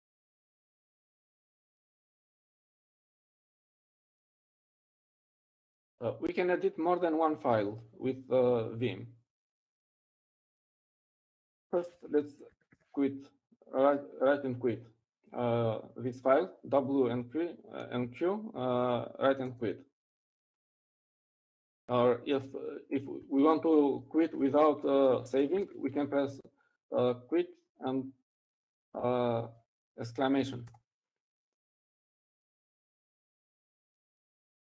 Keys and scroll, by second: 15.3-17.7 typing, 24.7 Up, 26.4-28.6 typing.